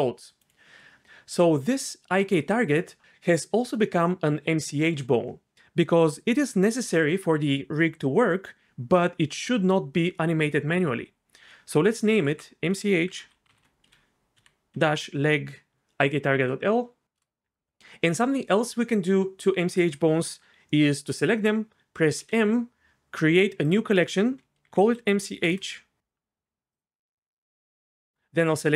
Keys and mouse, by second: 0.4-12.0 right drag, 12.0 F2, 22.2 m, 27.7 click.